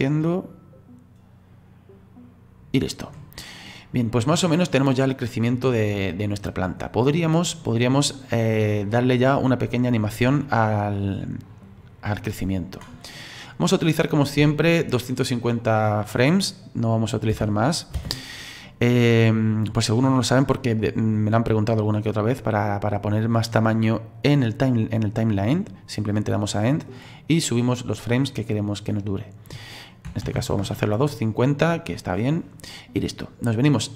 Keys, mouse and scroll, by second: 3.5-6.7 middle drag, 10.6-13.6 drag, 17.3 space, 17.9 space, 18.2 click, 18.9-22.9 drag, 22.9-25.5 scroll down 6, 26.7-32.0 drag, 33.2-33.9 drag.